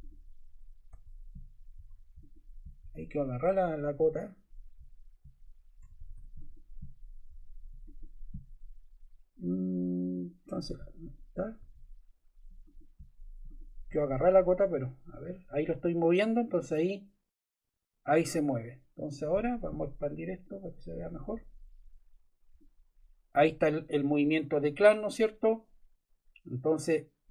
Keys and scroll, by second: 0.8 Escape, 5.7 Escape, 11.5 Escape.